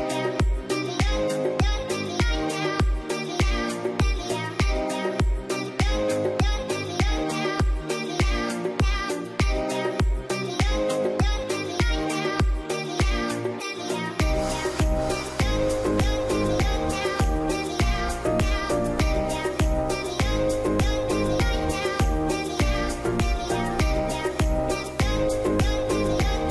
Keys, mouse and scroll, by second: 2.1-2.5 scroll up 1, 2.5 middle click, 2.9 scroll up 1, 3.6 alt+middle click, 4.1 z, 4.6-5.1 scroll down 1, 5.4 middle click, 6.0 scroll up 1, 6.6-7.1 scroll up 1, 7.8 scroll up 1, 8.8 scroll up 1, 11.1 scroll up 1, 11.2 scroll down 1, 11.8 scroll down 1, 13.4 middle click, 16.7 ctrl+g, 18.3 ctrl+z, 19.0 double click, 20.2-22.0 scroll down 1, 24.0-24.5 scroll down 1, 26.1 shift+click.